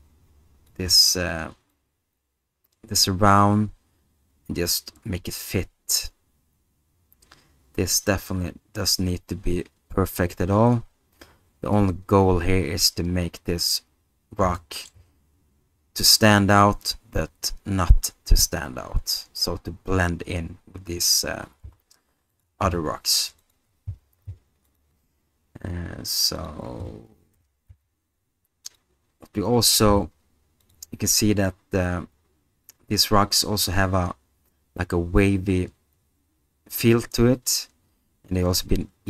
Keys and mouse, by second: 1.7-12.8 drag, 14.7 middle click, 21.6 s, 22.6 g, 24.8 drag, 27.3 r, 27.7 z, 28.6-29.1 drag, 29.9 g, 30.6 click.